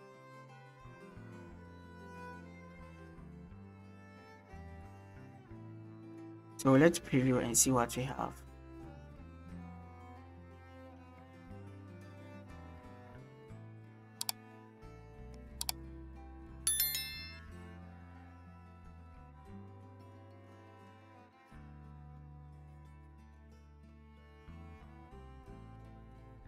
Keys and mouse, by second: 6.0 click.